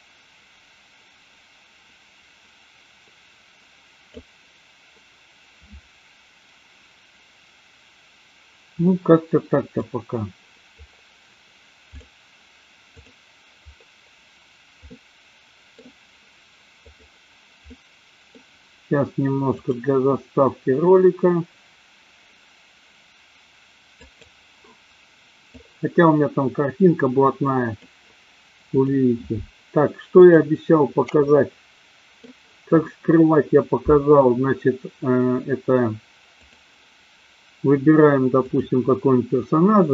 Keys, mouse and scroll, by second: 8.9 middle click, 11.9 click, 14.8-15.8 middle drag, 17.2 click, 17.7 middle click, 19.8 click, 31.3 middle click, 36.4 click, 38.4 click.